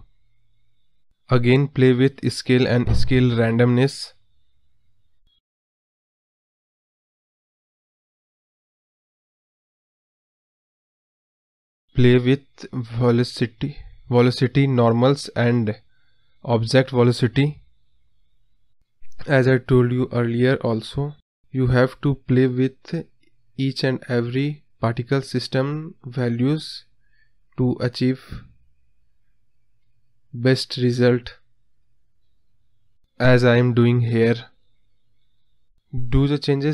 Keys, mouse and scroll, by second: 0.2-0.7 scroll down 4, 0.7-1.4 scroll up 1, 1.4 drag, 2.0 click, 3.7 scroll up 1, 6.7 click, 7.9 click, 9.5-9.9 scroll up 3, 9.9 scroll down 4, 10.2-11.8 drag, 12.5-12.9 scroll up 1, 12.9-14.0 drag, 14.5 click, 14.8 scroll up 2, 15.0-16.5 drag, 16.7 click, 17.3 space, 17.8-18.9 drag, 18.9 space, 21.6 space, 23.3-24.4 drag, 24.8 click, 24.9 space, 27.4 space, 28.1-29.3 drag, 29.3 space, 33.1 space, 35.6-36.7 drag.